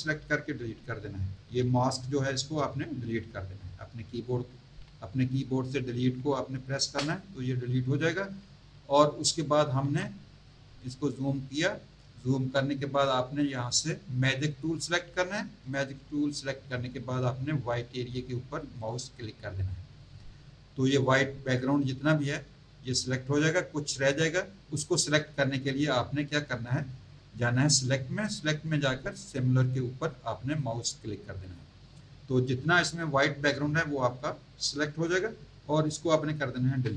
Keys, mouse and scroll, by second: 6.8 Delete, 9.8 z, 10.3 click, 14.5 click, 18.8 click, 27.6 click, 30.5 click, 36.7 Delete.